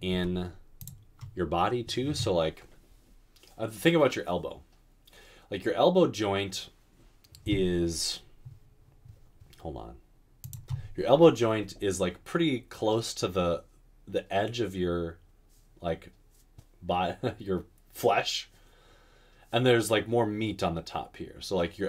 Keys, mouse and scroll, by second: 0.1 typing.